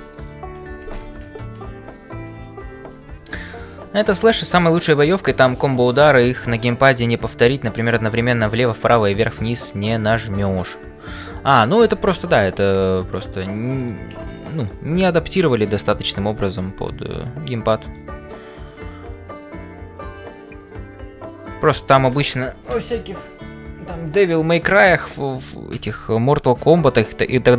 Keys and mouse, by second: 0.0-27.5 typing, 12.1 shift+middle click, 12.5 middle click, 13.8 click, 14.3 shift+middle click.